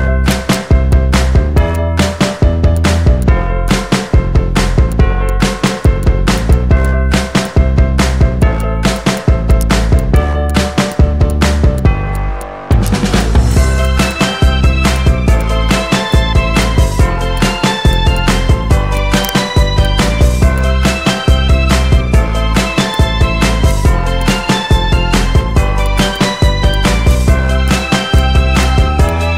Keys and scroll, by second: 14.0 z, 15.7 Up.